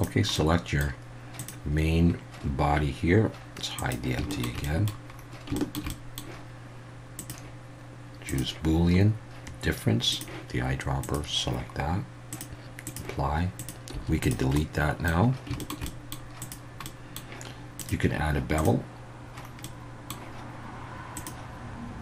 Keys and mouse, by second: 0.3-0.8 middle drag, 1.4 click, 3.8 click, 4.3 shift+middle click, 4.6 middle click, 5.5 shift+middle drag, 5.9 middle click, 7.2-8.4 drag, 10.1 click, 12.3-13.0 drag, 13.6 click, 13.9 x, 14.5-15.1 middle drag, 15.6 shift+middle click, 15.8 middle drag, 16.8-17.2 middle drag, 17.8-18.6 drag, 19.6-20.1 middle drag, 21.1 click.